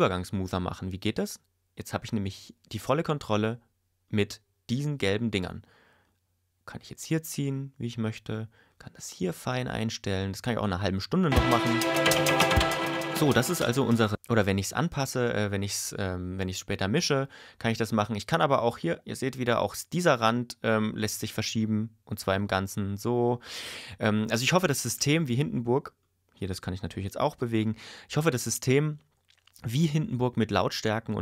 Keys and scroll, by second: 11.3 space, 14.1 space.